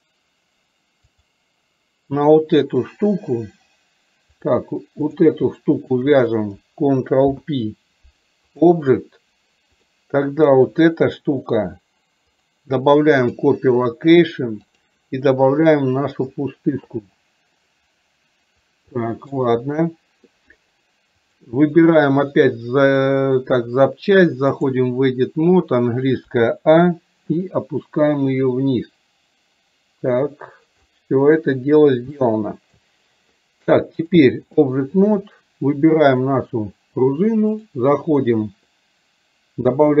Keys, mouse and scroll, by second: 1.1 click, 5.1 click, 6.1 shift+drag, 9.9 click, 12.4-13.5 drag, 14.7 click, 19.0-19.4 shift+middle drag, 21.2 click, 22.7-24.9 drag, 27.6-30.9 drag, 32.2 shift+middle click, 34.1-34.9 drag, 37.9-40.0 drag.